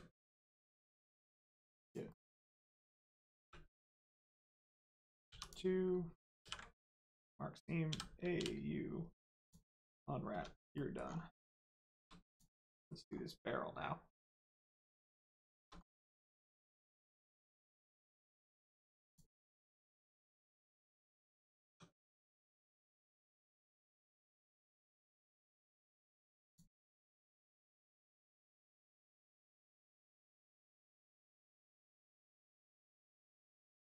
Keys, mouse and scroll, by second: 0.6 middle click, 1.8 click, 2.0 middle click, 3.4 3, 4.4 click, 5.2 2, 5.4 click, 6.4 ctrl+e, 7.0 click, 7.8 a, 9.4 click, 9.8-10.3 scroll down 1, 10.3 Tab, 10.7 middle click, 11.0 scroll down 1, 11.3 middle click, 11.8 shift+middle click, 12.2 click, 12.6 middle click, 13.0-14.1 scroll up 1, 15.3 shift+middle click, 15.7 scroll up 1, 15.9 Tab, 16.4 middle click, 16.6 scroll down 1, 17.0 middle click, 17.8 Tab, 18.6 click, 19.4 middle click, 19.8 click, 20.1 middle click, 20.5 Tab, 22.0 middle click, 22.4 shift+middle click, 22.6 scroll up 1, 26.4 click, 27.0 middle click, 29.3 middle click, 30.1 Tab, 30.4 middle click, 31.6 scroll up 1, 32.2 middle click, 33.4 click.